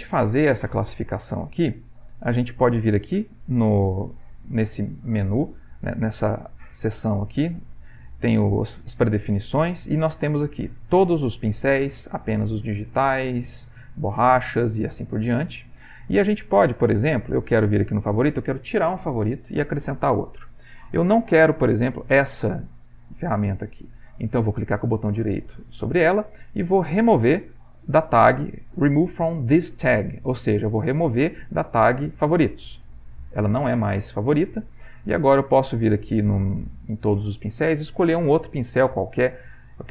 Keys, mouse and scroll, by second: 4.2 click, 6.6-7.8 drag, 10.7 click, 11.9 click, 12.7 click, 13.4 click, 14.1 click, 15.4 click, 16.8 click, 17.8 click, 23.2-33.1 right drag, 35.4-37.0 drag.